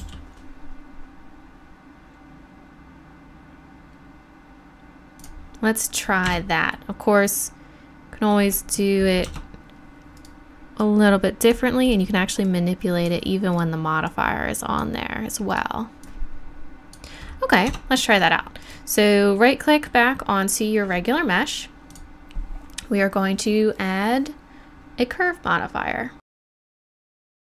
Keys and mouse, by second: 0.0 g, 1.8-5.2 middle drag, 6.3 Tab, 7.2-9.2 drag, 10.1 Tab, 10.1 right click, 17.3 middle click, 17.7 Tab, 21.9-24.4 drag.